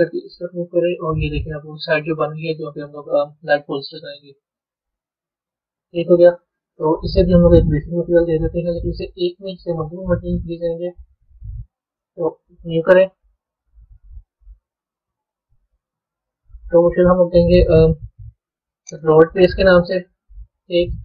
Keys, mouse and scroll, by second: 1.5-1.8 scroll up 6, 3.9 Tab, 4.4-4.9 scroll down 3, 5.3-7.5 middle drag, 7.5 click, 9.4-12.3 middle drag, 12.3-15.9 drag, 16.5 click, 16.6-19.7 drag.